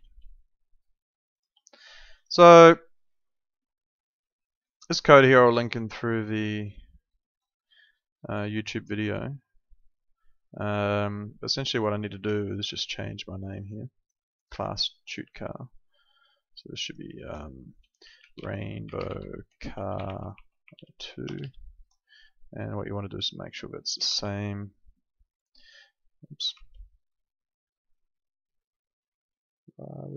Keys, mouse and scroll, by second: 0.0 alt+Tab, 1.3 alt+click, 2.1 click, 12.6 ctrl+2, 12.7 ctrl+2, 14.5 Escape, 15.2 click, 17.7-21.4 typing, 24.0 alt+Tab, 25.2 alt+click, 26.5 alt+Tab.